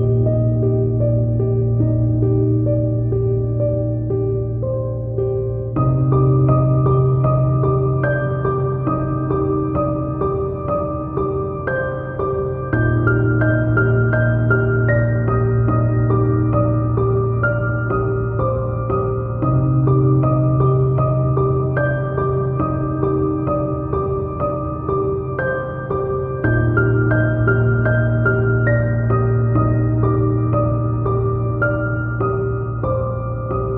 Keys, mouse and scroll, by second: 15.5 Tab, 15.6 KP_1, 15.9 shift+middle click, 16.0 scroll up 1, 16.6 middle click, 17.3 KP_1, 17.4 shift+middle click, 17.8 scroll up 1, 18.0 shift+middle click, 18.6 Tab, 18.7 click, 18.8 KP_7, 18.9 scroll up 1, 19.1 g, 20.4 shift+click, 20.7 scroll down 1, 20.8-21.8 middle drag, 20.9-23.6 typing, 21.3 ctrl+z, 21.5 scroll up 1, 21.8 click, 21.9 scroll down 1, 22.5 alt+click, 22.8 middle click, 23.2 scroll down 1, 23.6 click, 23.7 middle click, 24.0 ctrl+z, 24.3 middle click, 24.5 shift+click, 24.6 middle click, 24.7 shift+click, 24.8-25.2 scroll up 4, 24.9 middle click, 25.2 middle click, 25.4 scroll down 2, 25.5 click, 25.7 shift+click, 25.7 e, 26.0 ctrl+z, 26.4 alt+e, 26.9 shift+click, 27.4 scroll up 2, 27.5 middle click, 27.8 scroll down 2, 27.9-29.0 drag, 28.9 KP_1, 29.0-33.7 shift+middle drag, 29.1 Tab, 29.4 KP_1.